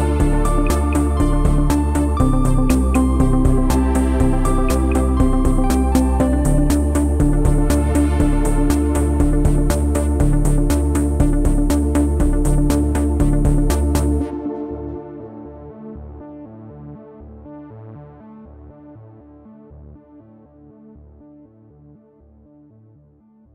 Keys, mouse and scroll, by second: 0.3 click, 0.4 b, 1.2 b, 1.6 g, 3.5 r, 6.2 g, 7.8 g, 9.9 r, 10.7 g, 12.0 ctrl+z, 12.6 g, 14.1 scroll down 4, 14.3 Tab, 14.9 g, 16.7 r, 20.7 middle drag, 21.0 scroll down 4, 21.2 b, 21.7 o.